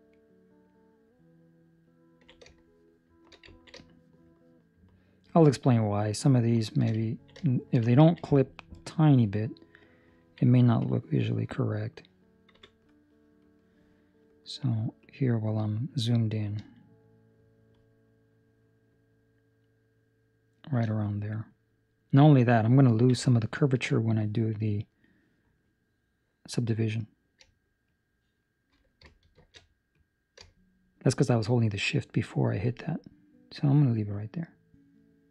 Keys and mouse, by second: 0.0 shift+middle click, 2.1 ctrl+middle click, 2.4 shift+middle click, 2.6 shift+middle click, 3.4 ctrl+middle click, 3.7 shift+middle click, 4.3 shift+middle click, 4.7 shift+middle click, 5.4 shift+middle click, 6.5 shift+middle click, 6.9 ctrl+middle click, 7.3 shift+middle click, 7.8 ctrl+middle click, 10.3 ctrl+middle click, 10.7 click, 15.0 click, 22.8 ctrl+middle click, 23.3 shift+middle click, 24.7 click, 27.8 shift+click, 29.3 shift+Escape, 29.9 click.